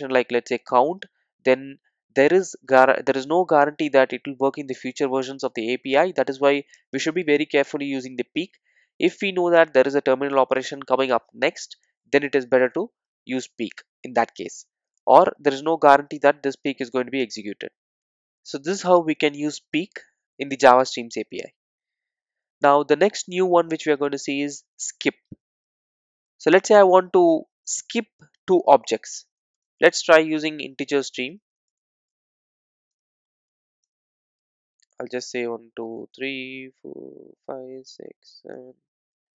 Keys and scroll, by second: 32.2 Return.